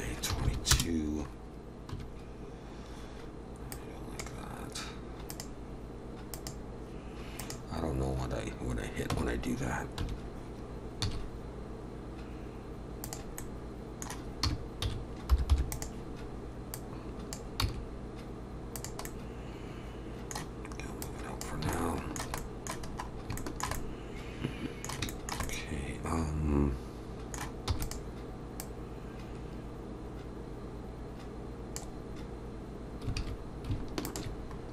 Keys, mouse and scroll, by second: 0.5 2, 1.9 1, 3.7 click, 5.3 click, 9.1 Tab, 10.0 1, 11.0 s, 13.4 middle click, 14.4 r, 16.7 click, 17.6 s, 19.0 middle click, 21.0 click, 21.7 shift+middle click, 22.4 middle click, 22.9-23.3 scroll up 2, 23.4 shift+middle click, 23.7 middle click, 25.1 shift+middle click, 25.4 middle click, 27.7 e, 28.6 click, 33.2 alt+a, 34.0 alt+shift+click, 34.6 scroll up 2.